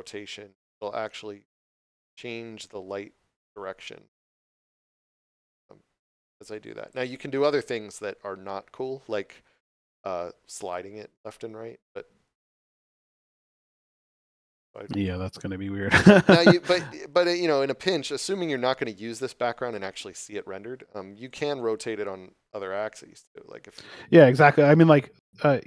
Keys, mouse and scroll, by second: 0.1 click, 10.7 click, 17.3 middle click, 21.3 click.